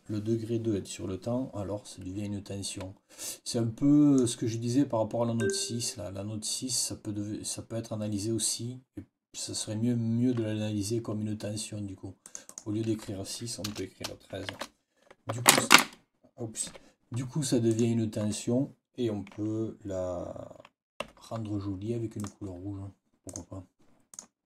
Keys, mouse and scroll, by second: 3.2-4.2 drag, 5.3 click, 12.1 click, 13.6 BackSpace, 16.6 Escape, 17.6 click, 20.9 F8, 22.1 click, 23.2 click, 24.0 click.